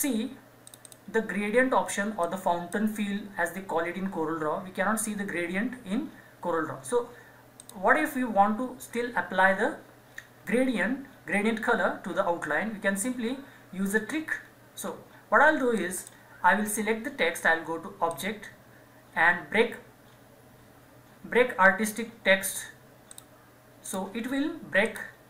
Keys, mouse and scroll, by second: 0.6-7.6 drag, 14.4-14.8 scroll down 1, 15.7 click, 15.7 scroll up 1, 18.1 click, 23.1 click, 24.2-24.8 scroll down 1, 24.8-25.2 drag.